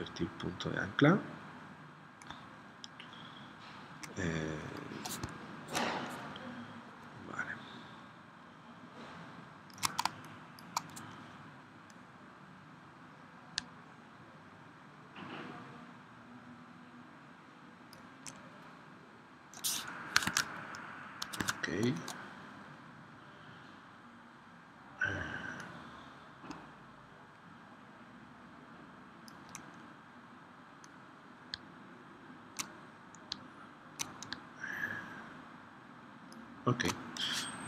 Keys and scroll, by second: 10.1 space, 20.1 super+Tab, 21.4 super+Tab.